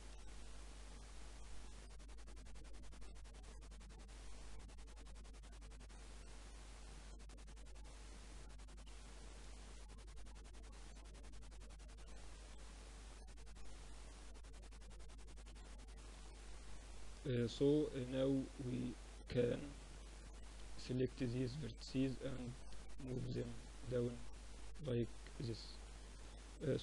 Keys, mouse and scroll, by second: 1.7 ctrl+r, 4.6 ctrl+r, 6.2 Tab, 6.4-10.1 middle drag, 9.3 Tab, 10.1 Tab, 10.7 Tab, 11.8 ctrl+r, 14.1 x, 15.5 Tab, 16.2 middle click, 17.4 Tab, 18.8-20.7 middle drag, 21.4-23.3 drag, 21.4-22.4 right drag, 23.1 Tab, 23.2 right click, 23.3-26.8 middle drag.